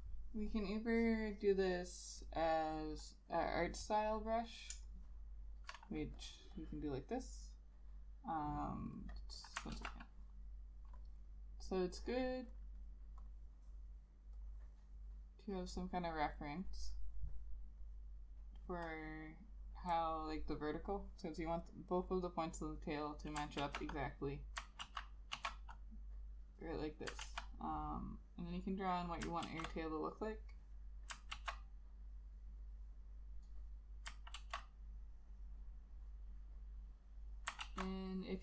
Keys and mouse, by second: 5.0 shift+click, 6.7 double click, 9.9 ctrl+z, 23.7 ctrl+z, 24.9 ctrl+z, 25.4 ctrl+z, 27.4 ctrl+z, 29.6 ctrl+z, 31.4 ctrl+z, 34.5 ctrl+z, 37.7 ctrl+z.